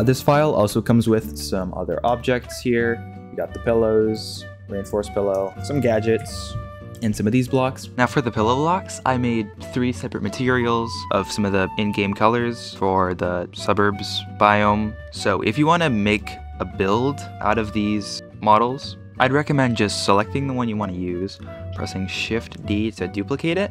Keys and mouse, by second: 1.1 shift+middle drag, 2.1 shift+middle click, 3.4-4.1 drag, 4.2 click, 4.8 drag, 6.1 KP_Decimal, 6.8 middle click, 22.5 shift+d.